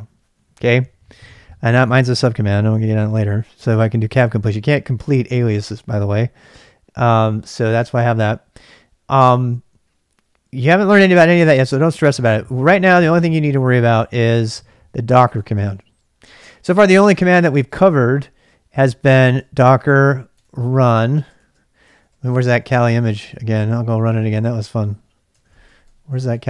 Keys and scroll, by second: 12.5-16.0 typing, 14.2 Return, 19.6-23.4 typing, 20.9 ctrl+[, 24.5-26.4 typing.